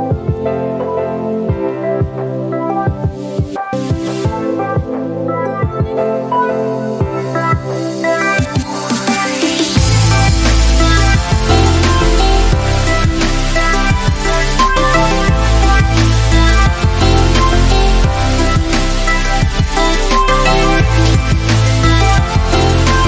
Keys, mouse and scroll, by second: 1.7 shift+click, 8.1 right click, 10.3 click, 14.1 alt+Num_Lock, 14.9 alt+click, 17.0 click.